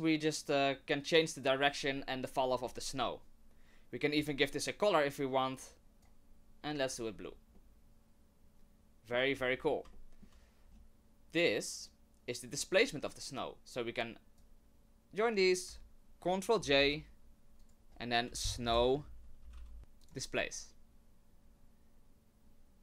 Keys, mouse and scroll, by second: 4.2 click, 5.5 click, 5.8 click, 6.8 click, 7.2-8.1 scroll down 2, 7.5 middle click, 9.3-9.8 scroll down 4, 9.9 shift+middle click, 10.6-12.6 scroll up 1, 12.6 middle click, 12.7 middle click, 13.4 click, 16.6 ctrl+j, 17.6 click, 21.3-22.8 scroll up 2.